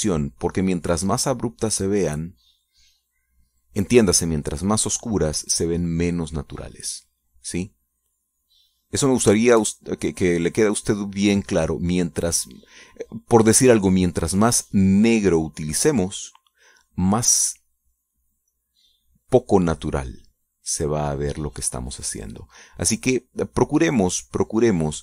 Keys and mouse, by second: 2.6-4.9 drag, 6.1-8.0 drag, 8.9-14.6 drag, 14.8 middle click, 15.8-20.1 drag, 20.1-25.0 drag.